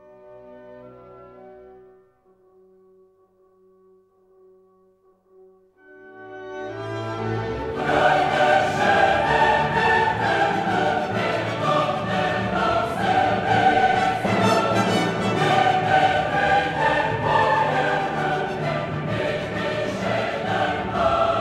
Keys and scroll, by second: 1.4 Return, 7.6 shift+Up, 12.9 shift+Up, 16.9 ctrl+Up, 20.3 ctrl+a.